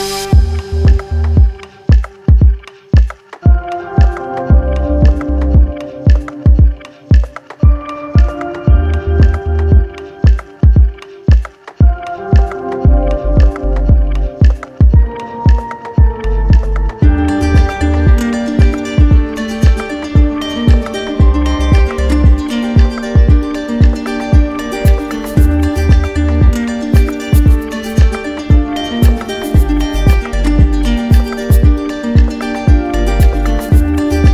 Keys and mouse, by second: 2.6 alt+right click, 4.8 alt+click, 7.4 alt+click, 8.1 right click, 8.7 shift+right click, 15.7 click, 16.9 click, 18.8 ctrl+click, 22.1 alt+click, 23.2-25.3 alt+drag, 31.4-32.5 drag, 33.5-34.3 right drag.